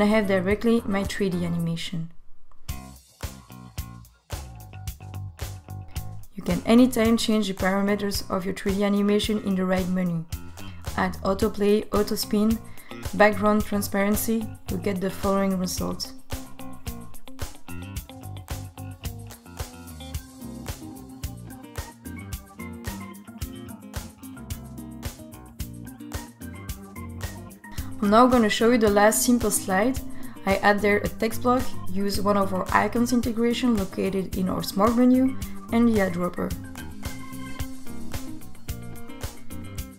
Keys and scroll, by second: 35.8 t.